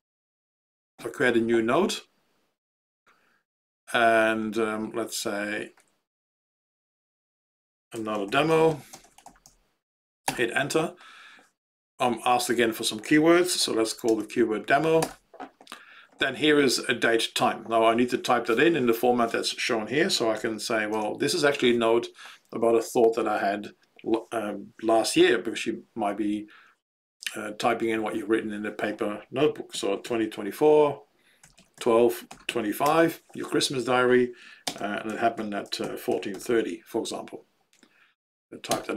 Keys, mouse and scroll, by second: 7.7-9.9 typing, 10.4 Return, 13.8 Down, 14.0 Tab, 15.0 Return, 19.8-20.9 typing, 29.7 2, 30.0 4, 31.1-33.3 typing, 34.6-36.8 typing, 38.8 Return.